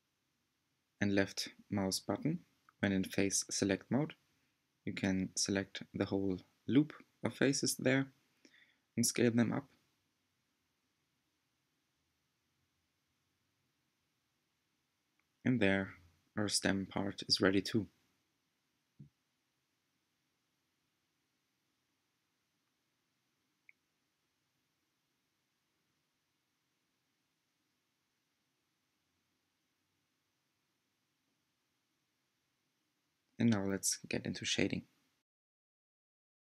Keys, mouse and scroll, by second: 0.9-2.5 alt+drag, 2.5 s, 8.0-9.6 middle drag, 9.6 3, 10.1-11.6 drag, 12.5 scroll up 1, 14.1 s, 16.1 g, 23.1 2, 24.2-25.7 alt+drag, 25.7 g, 30.2 s, 32.3 Tab, 33.1-36.2 middle drag.